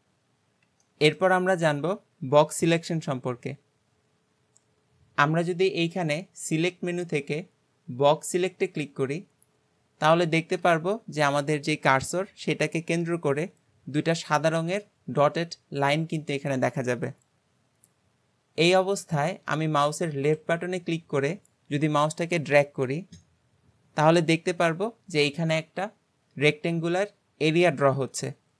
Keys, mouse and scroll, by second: 0.4-0.9 scroll up 1, 0.9-3.9 shift+middle drag, 5.9-9.1 drag.